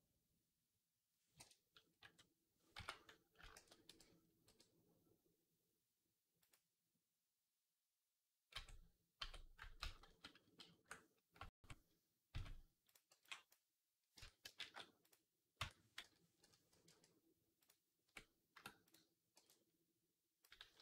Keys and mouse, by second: 1.8 r, 3.2-9.9 ctrl+drag, 3.4 ctrl+a, 4.3 r, 8.4 Tab, 9.0 Tab, 9.6 ctrl+z, 9.9 ctrl+z, 10.7 ctrl+z, 11.2 Tab, 12.1 z, 12.7 click, 12.9 b, 14.0 Tab, 14.4 shift+s, 14.6-20.8 right drag, 15.4 Tab, 15.8 ., 16.7 r, 17.9 Tab, 18.4 Tab, 19.2 b.